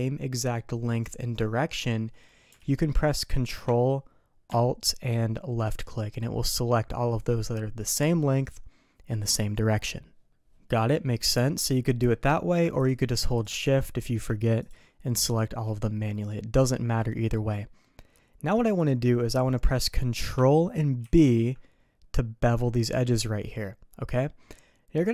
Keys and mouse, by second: 2.6 alt+a, 12.1 middle click, 12.8 click, 13.3 shift+click, 13.7 middle click, 14.6 shift+click, 15.8 middle click, 19.8 middle click, 21.0 ctrl+b.